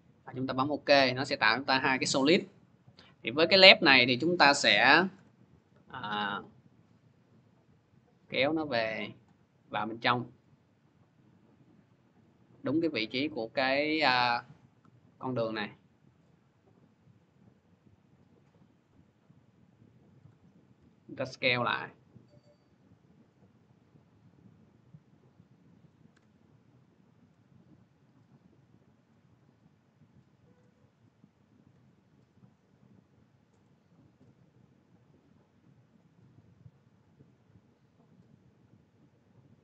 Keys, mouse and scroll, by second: 0.4 click, 2.1 click, 3.1 click, 4.9 p, 8.8-12.6 drag, 15.9 shift+click, 20.0 click, 21.6 click, 22.0 click, 22.0 s, 24.9 click, 25.9 p, 30.3 shift+click, 33.3 click, 39.3 click.